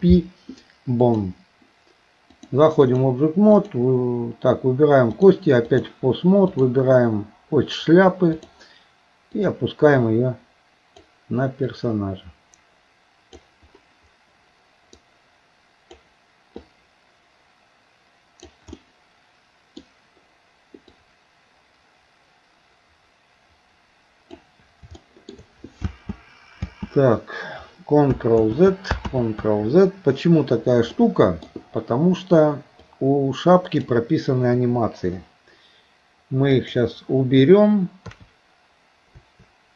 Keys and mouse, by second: 2.3 click, 3.6 click, 5.2 click, 8.3 click, 9.5-11.1 drag, 11.8-13.5 drag, 15.0-16.1 drag, 16.7-18.6 drag, 18.8-19.8 middle drag, 20.9-24.4 drag, 25.0 shift+middle click, 25.9 space, 26.6 space, 28.5 ctrl+z, 29.1 ctrl+z, 31.0 middle click, 32.8-33.8 drag, 34.6 Delete, 36.6 click, 38.1 KP_3.